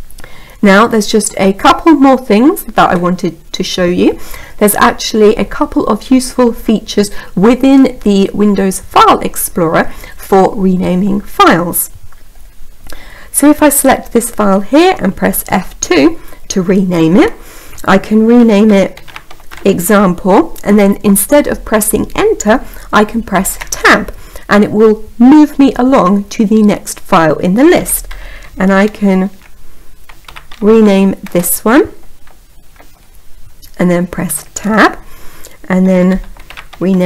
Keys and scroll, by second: 15.1 F2, 22.5 Tab.